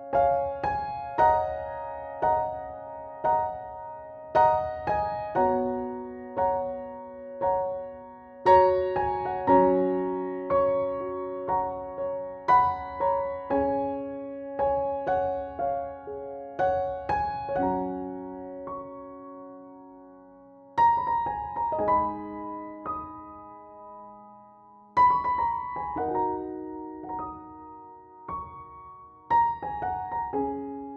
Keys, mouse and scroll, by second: 0.5 scroll up 1, 4.1-7.5 scroll down 1, 7.5 click, 8.4 KP_1, 10.3 scroll up 1, 11.1 scroll down 1, 12.7-19.9 drag, 20.4 scroll up 1, 21.5 scroll down 1, 24.7 scroll up 1, 25.6-26.3 scroll down 1, 26.9 click.